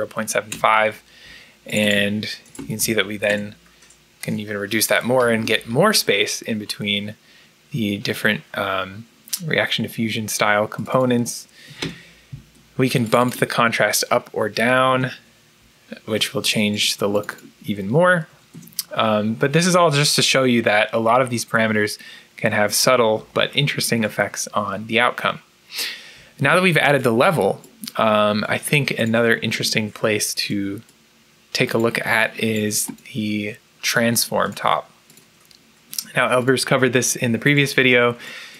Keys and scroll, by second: 0.4 Return, 2.2-3.1 typing, 3.2 Return, 11.7 Return, 14.3 2, 18.4 Return.